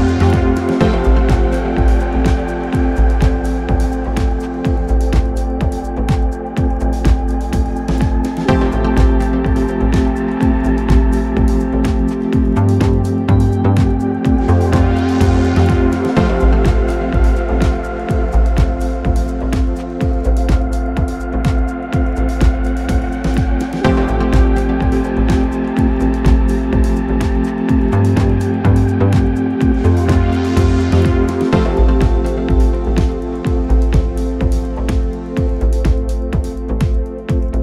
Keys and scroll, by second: 1.7 ctrl+F1, 5.7 ctrl+F1, 20.7 ctrl+d, 21.1 Escape, 22.7 ctrl+F1, 23.3 ctrl+F1, 31.0 3, 34.2 ctrl+z, 34.7 1.